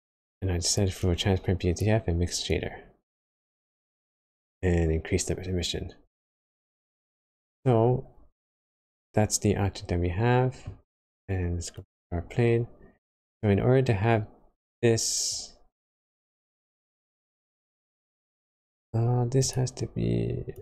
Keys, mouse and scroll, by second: 0.9 click, 7.8-9.0 scroll down 6, 9.0 middle click, 11.7 click, 19.4 click.